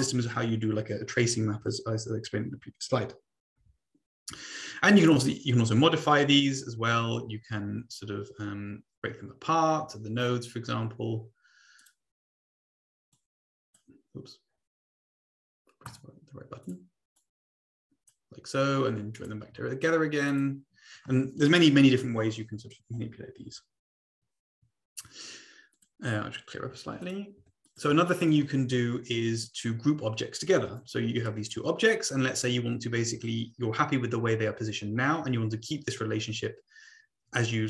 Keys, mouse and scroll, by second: 4.9 click, 5.5-6.6 drag, 11.8 click, 13.1 click, 15.8 click, 16.6 click, 17.1 click, 19.1 shift+click, 20.3 click, 25.7 click, 26.5 Delete, 27.1 click, 27.4 Delete, 27.8 click, 28.1 click, 29.6-30.8 drag, 31.2 click.